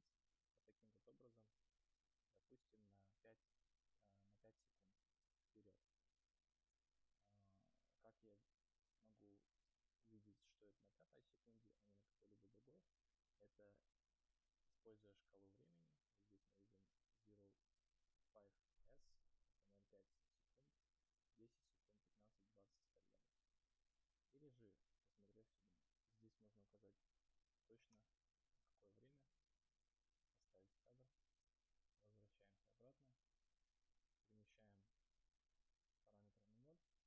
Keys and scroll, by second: 28.1 Return, 28.6 Return.